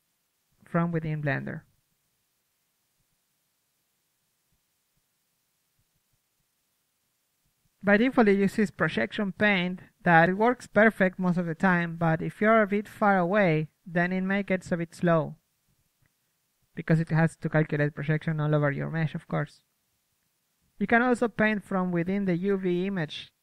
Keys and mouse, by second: 3.8 KP_1, 4.3 middle click, 7.5-8.8 drag, 8.8-11.2 middle drag, 11.2-15.7 drag, 15.7-17.0 middle drag, 17.0-18.5 drag, 20.0-21.4 drag, 21.4-21.9 middle drag.